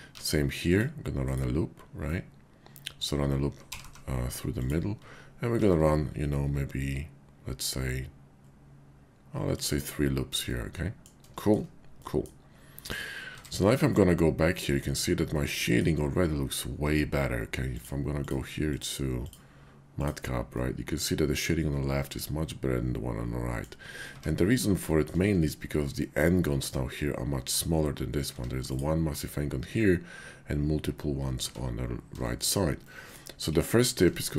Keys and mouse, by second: 0.0 ctrl+r, 1.2 click, 2.1-3.1 middle drag, 3.6 g, 3.8 g, 4.6 click, 5.5 ctrl+r, 9.7 click, 10.4 middle click, 11.4 shift+click, 12.0 middle click, 13.3 Tab, 13.9-14.8 middle drag, 15.3 middle click, 17.6 click, 18.1 click, 18.7-20.2 drag, 20.6-23.6 middle drag, 24.0 Tab, 24.8 shift+click, 28.3 Tab, 31.4 Tab, 32.2 shift+click, 32.8 middle click, 34.2 shift+click.